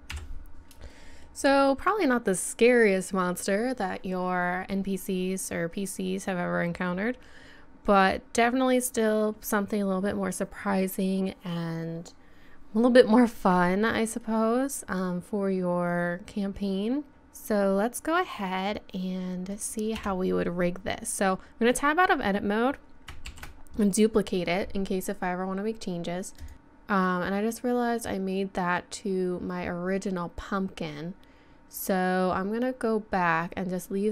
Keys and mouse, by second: 0.1 KP_1, 15.3-16.8 middle drag, 20.0 Tab, 23.4 shift+d, 26.4 click.